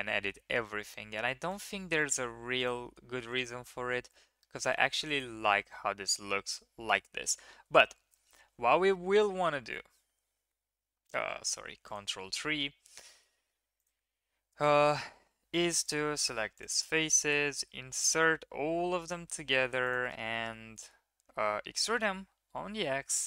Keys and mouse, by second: 1.5 click, 2.6 middle click, 3.3 middle click, 4.1-4.7 middle drag, 5.0 middle click, 7.6 KP_1, 9.2 KP_1, 9.6 KP_3, 10.7 ctrl+KP_3, 13.0 shift+middle drag, 14.0 Tab, 14.9 shift+drag, 15.6 3, 16.1 shift+click, 17.6 i, 20.3 click, 20.7 click, 21.6 e.